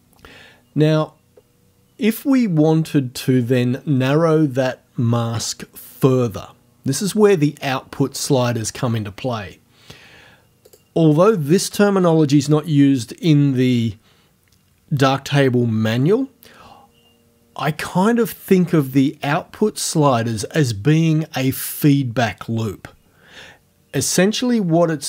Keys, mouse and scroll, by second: 0.6-1.3 scroll down 2, 10.7 click.